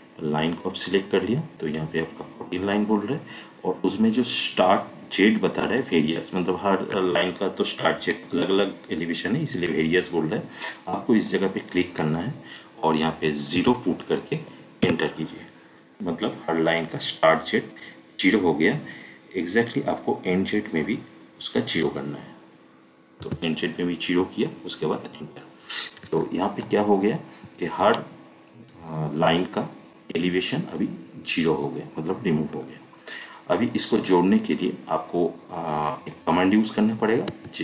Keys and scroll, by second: 13.5 0, 14.8 Return, 23.2 0, 25.1 Return, 27.7 Escape, 37.3 Escape.